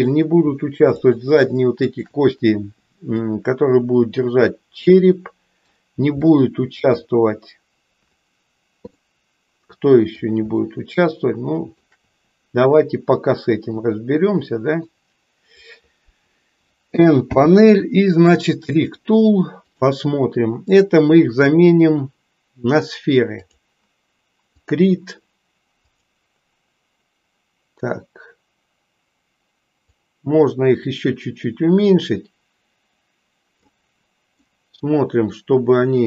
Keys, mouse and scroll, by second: 1.0 shift+click, 3.3-5.8 middle drag, 6.3 middle click, 9.0-10.2 middle drag, 10.6-11.9 shift+middle drag, 13.9-14.9 middle drag, 17.2 n, 18.6 click, 19.6-23.6 drag, 24.5 click, 25.9 click, 29.9-34.5 drag, 34.5-36.0 middle drag.